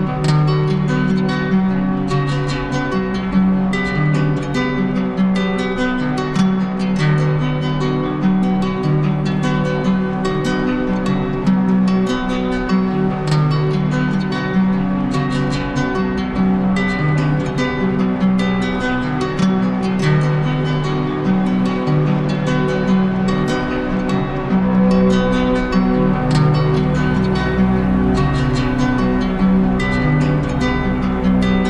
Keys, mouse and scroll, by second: 3.7 click, 6.2 click, 6.5 ctrl+z, 9.3 click, 9.5 ctrl+z, 10.8 click, 25.9 click, 28.4 click, 28.9 shift+click, 29.7 shift+click.